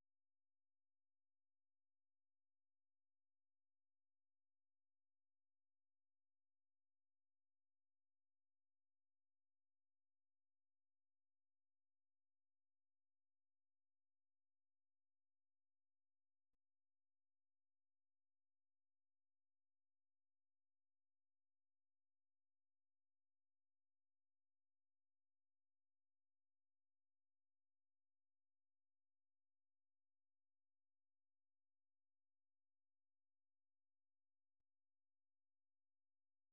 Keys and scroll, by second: 0.0-10.5 typing, 11.8 j, 13.9-15.5 typing, 16.7-19.4 typing, 21.1-24.8 typing, 27.5 typing, 28.6 alt+BackSpace, 28.8-33.1 typing.